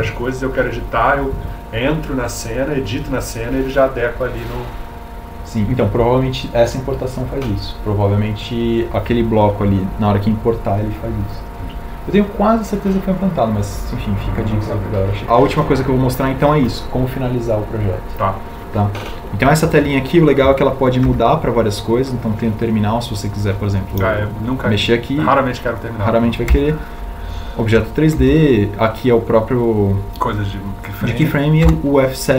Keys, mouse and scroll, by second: 20.9 shift+F4, 26.0 shift+F5.